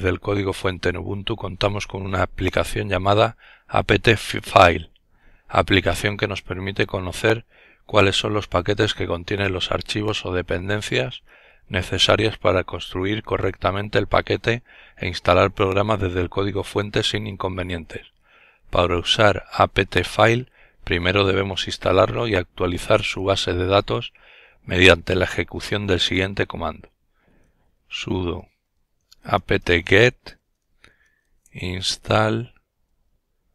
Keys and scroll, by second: 25.8-30.9 typing.